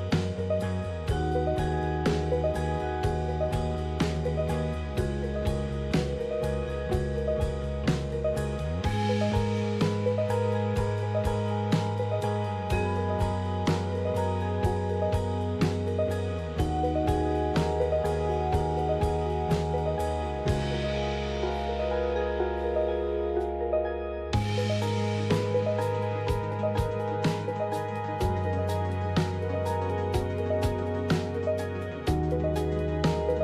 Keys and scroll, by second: 7.4 alt+Tab, 9.0-11.3 typing, 12.5 typing, 13.8-15.2 typing, 15.5 Tab, 17.7 Return, 19.7-27.4 typing, 26.5 Tab, 27.4 Return.